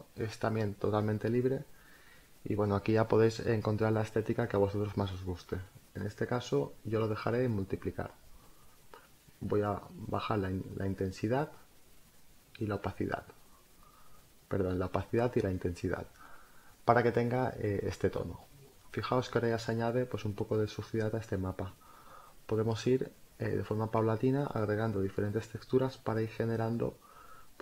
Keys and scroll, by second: 22.7 space, 25.3 Return.